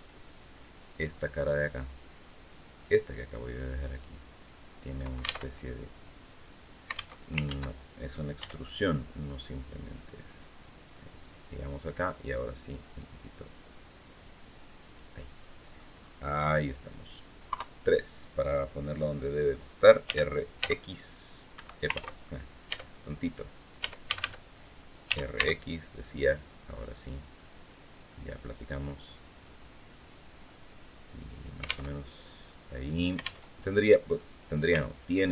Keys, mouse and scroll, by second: 1.4 click, 2.6 right click, 3.2-4.8 drag, 5.2 alt+Tab, 6.9 alt+Tab, 7.2 ctrl+alt+z, 8.1 e, 11.0 click, 11.8-13.0 drag, 14.0 click, 15.2 middle click, 16.1 scroll down 2, 17.2 KP_3, 19.8 r, 20.3 x, 21.3 Escape, 21.7 ctrl+z, 22.4 Tab, 23.6 Tab, 23.8 a, 24.8 r, 25.1 x, 27.9 click, 29.2 click, 30.5 click, 31.6 alt+Tab, 33.2 alt+Tab, 33.9-34.2 scroll up 2, 34.5 shift+click.